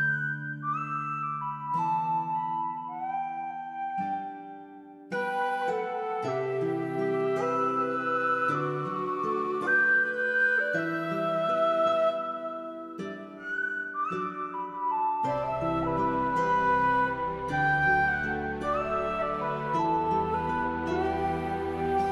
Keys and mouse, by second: 0.6 k, 4.7 ctrl+r, 5.2 right click, 6.1 shift+click, 6.6 k, 7.1 j, 7.3 middle click, 7.9 click, 8.5 j, 8.6 middle click, 9.0 middle click, 9.3 click, 9.6 click, 9.8 middle click, 10.4 middle click, 11.2 3, 11.3 click, 11.6 x, 13.4-16.4 typing, 13.5 shift+click, 13.7 click, 14.4 click, 14.8 click, 15.4 middle click, 15.9 middle click, 17.0 click, 17.2 middle click, 18.2 alt+click, 18.7 shift+click, 19.1 Tab, 19.2 shift+middle click, 19.7 shift+middle click, 19.9 Tab, 20.1 shift+middle click, 20.3 1, 20.4 alt+z, 21.0 click.